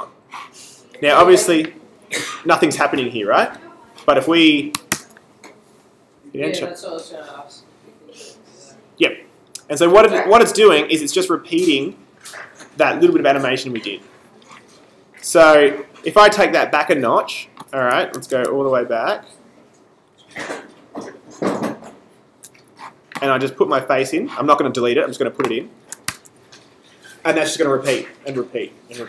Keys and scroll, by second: 4.9 super+Return, 18.1 super+z, 26.1 super+Return.